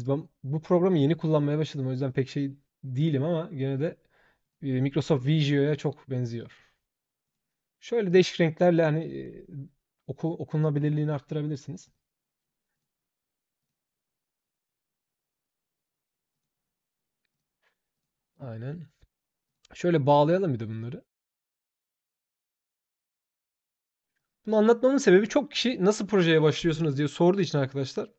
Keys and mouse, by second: 1.8 shift+click, 2.8 shift+click, 3.5 shift+click, 4.2 shift+click, 7.0 shift+click, 7.9 shift+click, 8.8 shift+click, 11.6 shift+click, 12.5 shift+click, 13.4 shift+click, 16.1 shift+click, 17.1 shift+click, 17.7 shift+click, 19.2 shift+click, 20.5 shift+click, 21.2 shift+click, 21.9 shift+click, 22.1 shift+click, 22.4 shift+click, 22.6 shift+click, 23.1 click, 23.4 click, 24.1 shift+click, 25.3 shift+click.